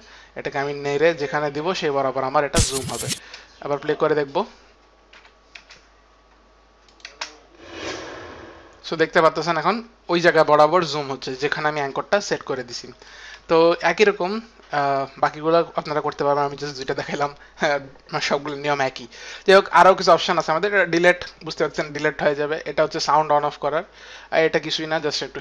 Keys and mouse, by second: 0.0 click, 2.9 click, 4.9 click, 5.6 click, 5.6 space, 5.8 click, 5.8 space, 6.8 click, 9.0 click, 9.0 space, 11.0 click, 11.0 space, 14.8 click, 17.8 click.